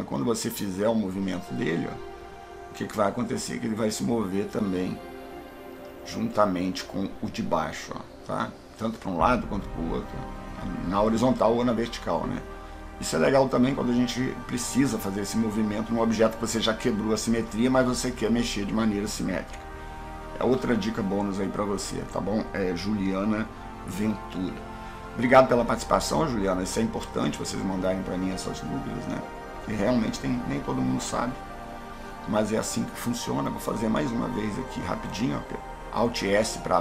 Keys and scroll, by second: 35.6 alt+s.